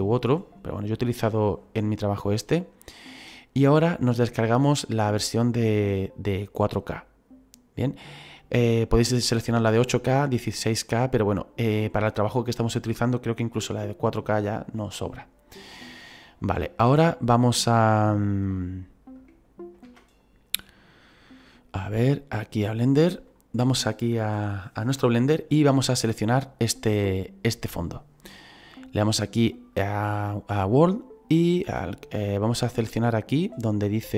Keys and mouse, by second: 19.8 alt+Tab, 22.5 alt+click, 29.7 click.